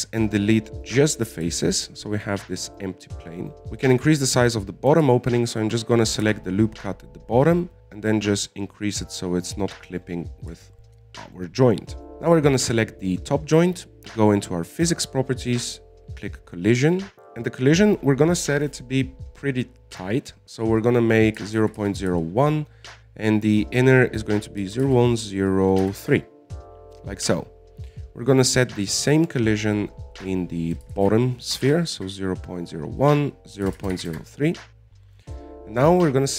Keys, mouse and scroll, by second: 0.2 x, 2.8 Tab, 3.1 middle click, 3.7 click, 4.5 right click, 6.5 alt+shift+right click, 6.8 alt+shift+right click, 7.3 scroll down 1, 7.6 z, 7.8 s, 11.6-12.3 scroll down 8, 11.9 Tab, 13.2 right click, 15.7 click, 17.6-21.8 drag, 25.0-28.1 drag, 29.7 right click, 30.6-36.3 drag, 36.3 scroll down 3.